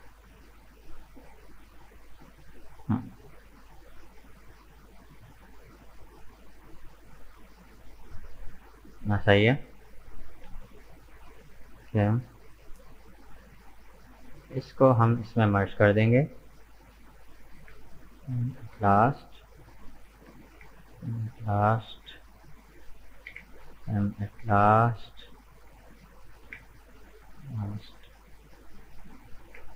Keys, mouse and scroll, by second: 6.6 right click, 7.2 right click, 7.7 Tab, 7.9 right click, 8.2 scroll up 4, 8.7 middle click, 9.5 right click, 9.8 Tab, 10.1-13.2 middle drag, 14.0 right click, 14.8 shift+right click, 17.6 m, 19.2 right click, 19.7 shift+right click, 20.6 m, 21.9 right click, 22.5 shift+right click, 23.3 m, 24.9 right click, 25.4 shift+right click, 26.5 m, 28.0 right click, 28.6 shift+right click, 29.5 m.